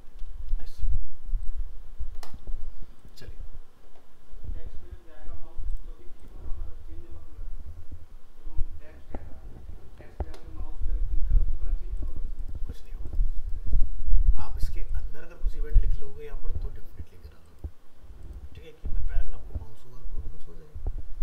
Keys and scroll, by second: 9.8 alt+Tab.